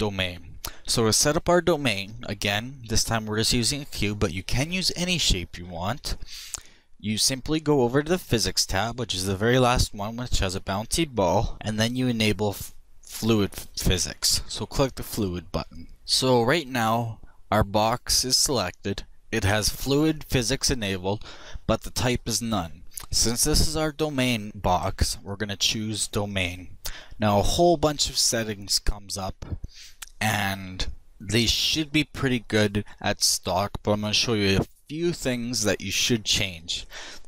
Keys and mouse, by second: 7.7-10.8 middle drag, 10.8-12.2 drag, 15.4 click, 18.6 click, 24.9-26.7 drag, 27.7-37.2 middle drag.